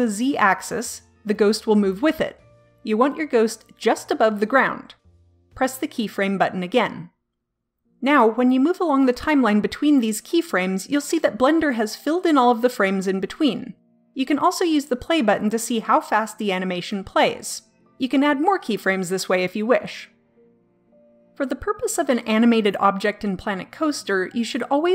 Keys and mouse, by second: 1.5-3.3 drag, 6.1-7.8 drag, 7.8 middle click, 9.0-11.3 drag, 15.5-24.9 drag.